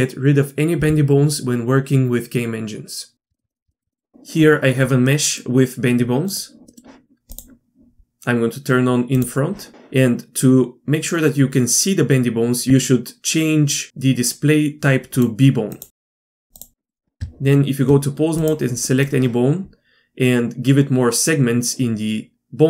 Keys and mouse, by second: 3.3 middle drag, 5.1-6.3 middle drag, 6.3 click, 7.3 click, 9.2-9.7 drag, 15.2 click, 16.8 middle click, 17.2 Tab, 18.4 click.